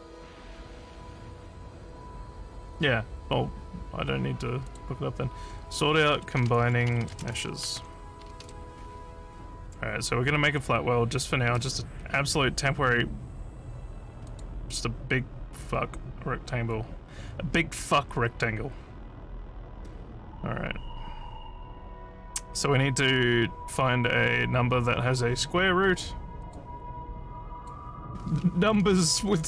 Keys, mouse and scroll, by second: 0.9 scroll down 1, 1.9 scroll down 1, 4.7 click, 6.2-8.9 typing, 14.3 click, 26.5 click, 27.6 click, 28.9-29.4 typing.